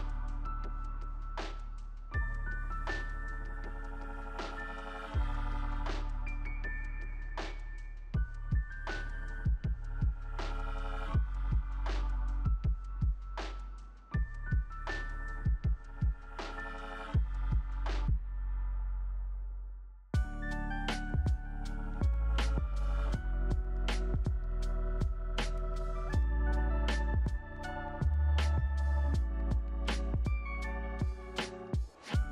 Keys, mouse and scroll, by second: 11.1 double click.